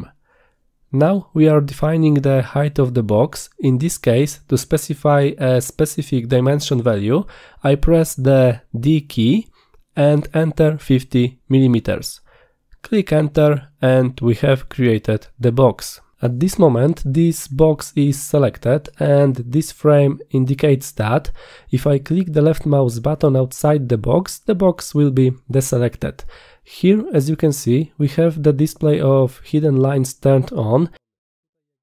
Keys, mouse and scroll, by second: 10.0 d, 16.3 middle click, 16.3-16.7 scroll up 4, 16.6 middle drag, 25.4 click.